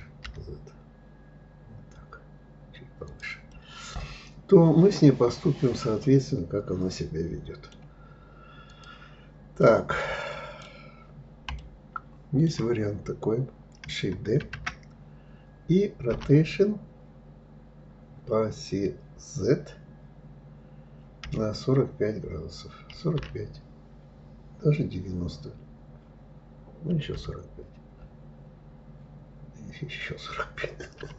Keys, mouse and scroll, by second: 3.1-6.1 middle drag, 8.3 click, 9.3-14.1 middle drag, 14.1 shift+d.